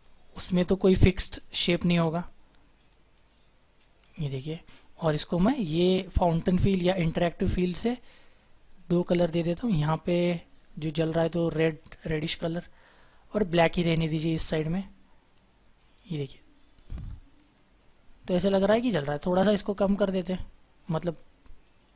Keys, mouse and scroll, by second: 3.9-4.6 scroll down 1, 7.6-9.6 scroll up 1, 14.6 double click, 15.9 right click, 17.3-19.7 scroll down 1, 19.7-20.3 scroll up 1.